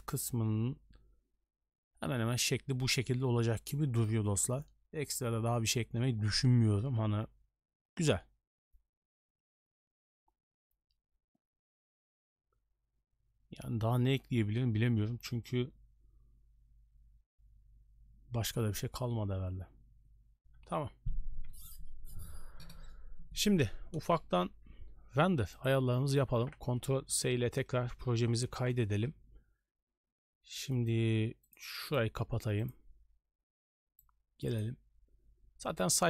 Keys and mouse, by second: 25.8 click, 26.9 ctrl+s, 27.9 n, 28.6 ctrl+space, 30.8-31.5 middle drag, 31.5 right click, 31.9 middle click, 34.2 click.